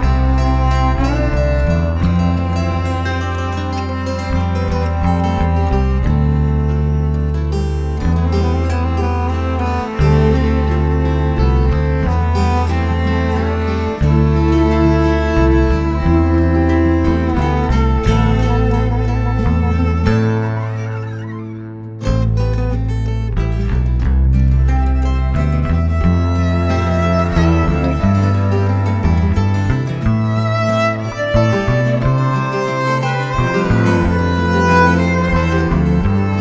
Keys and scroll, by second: 0.0-0.9 typing, 1.6 Escape, 2.0 alt+Tab, 2.1 alt+Tab, 21.8 Escape, 21.9 Escape, 22.0-23.0 typing, 23.3 Escape, 24.0-26.2 typing, 26.3 Escape, 27.9 Escape, 28.0 Escape, 28.5 ctrl+z, 28.7 ctrl+z, 28.9 Escape, 28.9 ctrl+z, 30.3 Escape, 30.6-33.2 typing.